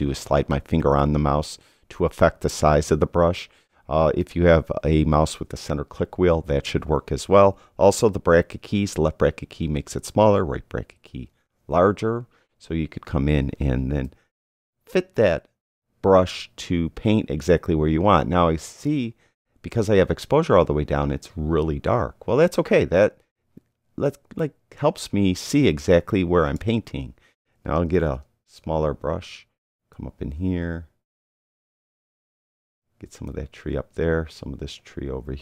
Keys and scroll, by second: 8.9 [, 10.1 [, 10.9 ], 11.2 [, 14.0 [, 27.7 [.